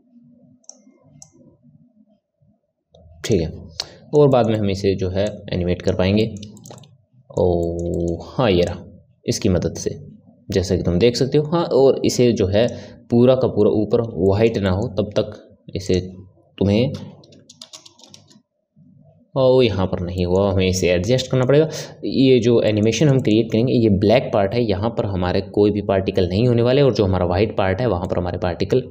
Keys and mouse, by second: 3.8-5.3 middle drag, 5.3 click, 6.2-8.6 middle drag, 8.6-11.7 drag, 14.2-15.8 shift+middle drag, 15.8-19.0 drag, 20.1-26.3 middle drag, 28.0-28.9 middle drag.